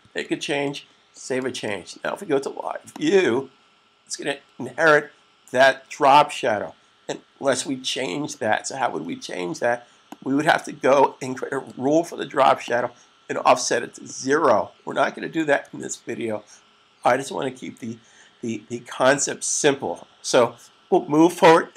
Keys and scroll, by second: 15.5 super+s.